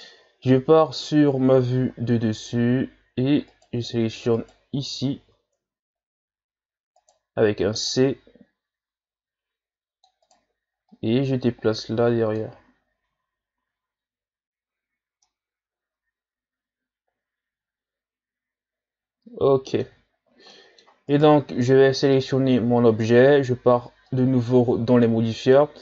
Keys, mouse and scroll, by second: 0.5 KP_7, 1.5-1.9 shift+scroll up 4, 3.5 alt+right click, 4.4 alt+right click, 5.0-5.7 shift+scroll up 4, 5.7 z, 6.0-7.0 scroll up 2, 7.0 right click, 7.3 c, 10.9-12.7 drag, 12.7 z, 13.1 Tab, 13.6 a, 14.0-14.8 scroll down 2, 14.8-15.2 scroll down 3, 15.2-18.3 middle drag, 20.1-20.5 shift+scroll down 1, 20.5 middle click, 21.1 right click, 24.1-25.8 drag.